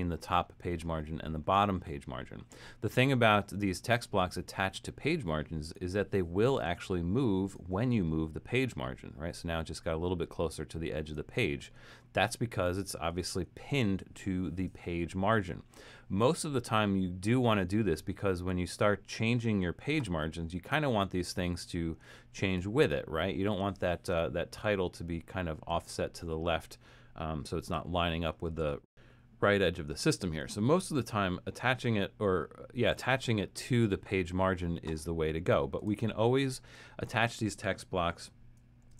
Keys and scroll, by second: 12.6 super+z, 13.2 super+z, 28.1 super+z.